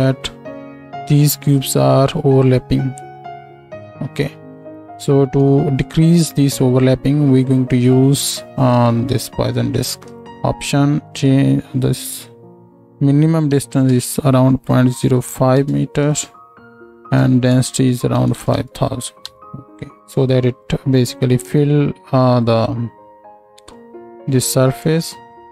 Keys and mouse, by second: 18.3 KP_0, 21.6 click.